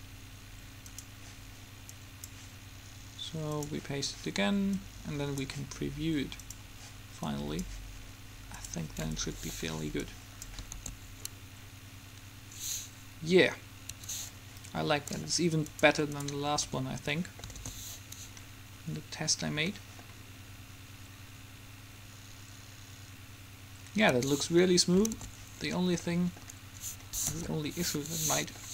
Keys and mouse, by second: 9.2 middle click, 10.9 alt+a, 14.2 Escape, 15.9-17.2 drag, 17.2 a, 21.2-23.4 a, 24.3 Escape, 24.7 click, 25.3 alt+a, 27.4 KP_5.